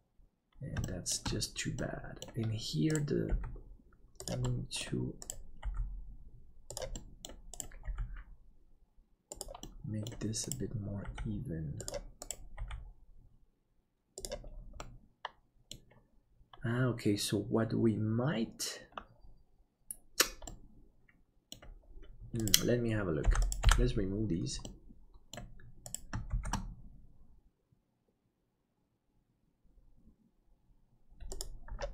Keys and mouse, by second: 0.8 shift+middle click, 1.8 middle click, 3.3 g, 4.6 middle click, 5.6 g, 7.0 middle click, 9.6 middle click, 11.0 g, 12.6 g, 14.9 middle click, 20.6-21.6 middle drag, 23.3 Delete, 23.7 Delete, 24.6 middle click, 26.3 shift+d.